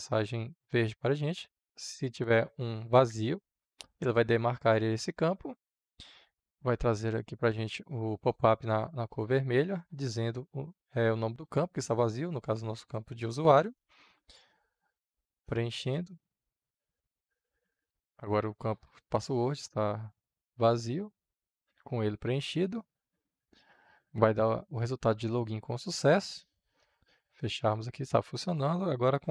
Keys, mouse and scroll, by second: 13.3-14.1 typing, 14.9-20.7 drag, 20.4-22.4 typing, 21.3 click, 22.8-29.3 drag.